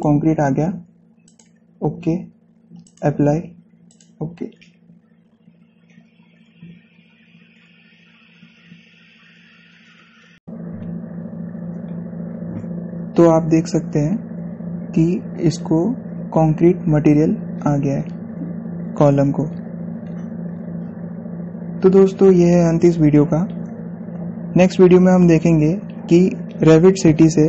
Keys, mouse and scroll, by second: 0.7 click, 13.8 scroll up 1, 16.0 scroll up 1, 18.3 scroll down 1.